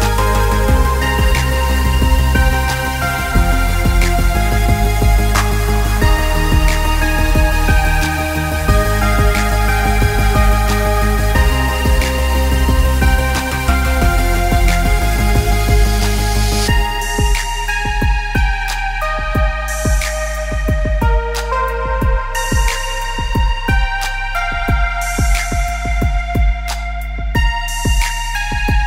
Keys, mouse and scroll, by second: 0.4 click, 5.1 click, 5.9 click, 8.5 click, 11.7 click, 12.5 click, 15.0 KP_0, 17.8 KP_0, 20.3 click, 21.6 shift+d, 24.9 click.